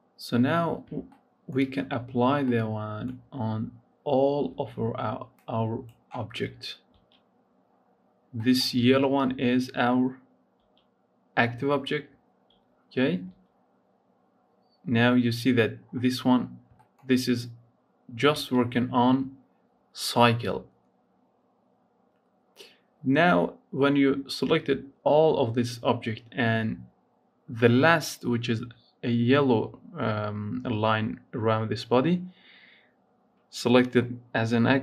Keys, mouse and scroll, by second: 0.6 scroll up 1, 1.0 shift+middle click, 1.9 scroll down 2, 2.5-4.5 middle drag, 4.5 z, 5.6 click, 6.9 z, 7.5-8.2 scroll up 1, 8.2 middle click, 8.7 z, 9.4 z, 10.5 z, 11.2-12.5 scroll down 2, 12.5 z, 13.4 z, 14.7-15.0 scroll up 2, 15.0-18.4 scroll down 2, 18.4 z, 26.3 scroll up 1.